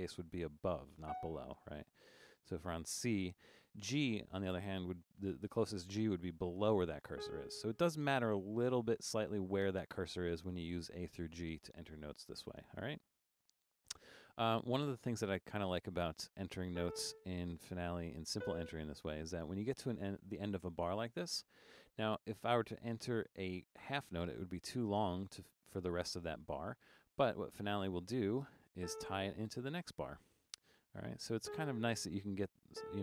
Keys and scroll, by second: 1.1 f, 1.9 Down, 2.0 Down, 7.2 g, 16.0 Up, 16.7 a, 18.4 b, 27.3 6, 28.5-29.3 typing, 31.4 g, 32.5-33.0 typing.